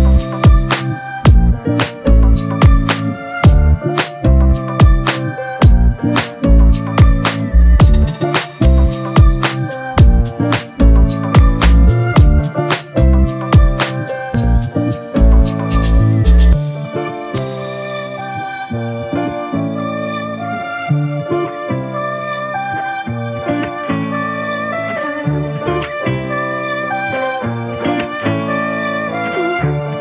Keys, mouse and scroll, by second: 9.7 double click, 18.1 ctrl+click, 18.5 right click, 21.0 double click.